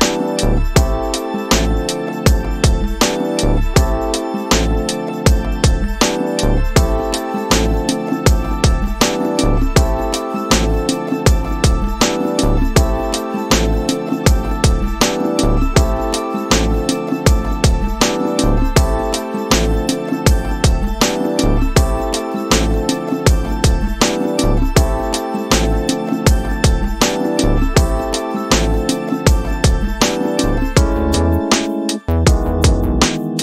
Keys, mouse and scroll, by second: 1.1 click, 3.4-4.6 drag, 6.6 middle click, 9.7-10.7 drag, 12.7-14.6 right drag, 16.1-19.2 drag, 19.9-21.2 right drag, 23.0-24.2 drag, 25.4-26.5 right drag, 28.1 middle click, 30.1-32.5 drag, 33.0-33.4 right drag.